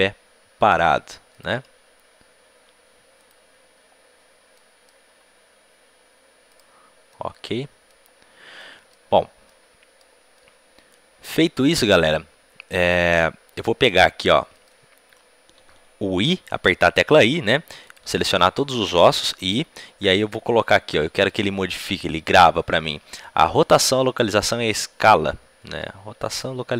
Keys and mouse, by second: 1.3-2.9 right drag, 1.5 r, 3.8-5.1 right drag, 5.1 r, 5.2-6.4 middle drag, 7.0 right click, 11.0-12.2 middle drag, 13.0 middle click, 13.3-16.1 middle drag, 17.8 middle click, 18.0-26.3 drag, 18.0 i, 18.0 a, 18.2 a.